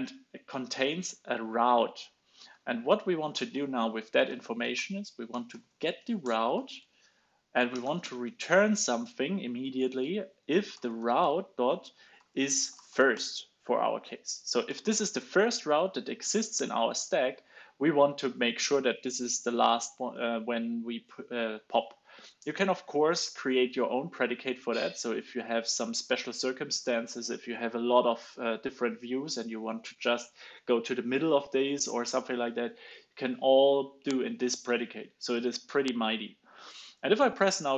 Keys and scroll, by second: 1.9 alt+super+Left, 2.4 alt+super+Left, 3.2 alt+Right, 3.4 alt+Right, 14.2 super+s, 14.6 alt+super+l, 14.9 super+s.